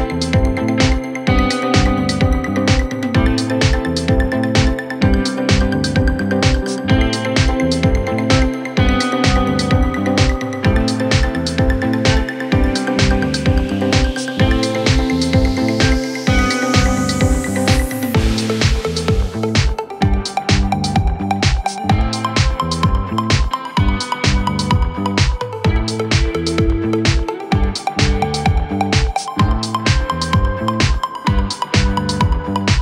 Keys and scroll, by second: 28.8 shift+F2, 30.1 F3.